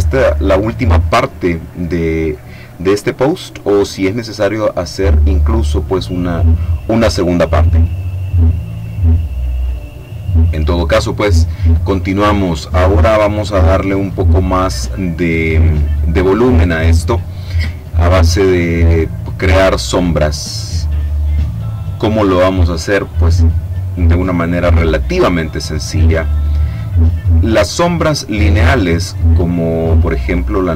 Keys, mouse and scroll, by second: 26.6 click, 27.7 click.